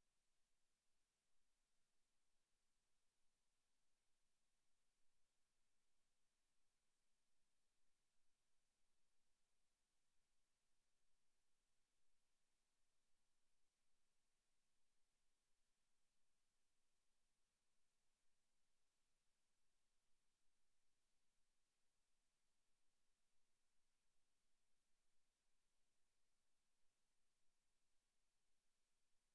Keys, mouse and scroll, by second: 0.3 alt+shift+right click, 0.7 e, 1.0 click, 1.6 click, 3.7 a, 4.2 ctrl+r, 5.8 click, 6.1 s, 8.7 click, 8.9 a, 9.6 alt+shift+right click, 10.0 s, 10.6 click, 10.7 e, 11.1 click, 11.8 click, 12.4 s, 13.7 click, 14.1 Tab, 14.8 middle click, 16.0 s, 16.7 s, 19.8 ctrl+click, 20.0 ctrl+z, 20.9 s, 21.7 s, 24.4 click, 24.6 middle click, 25.5 shift+middle click, 25.8 middle click, 26.9 shift+middle click, 27.3 s, 28.0 s.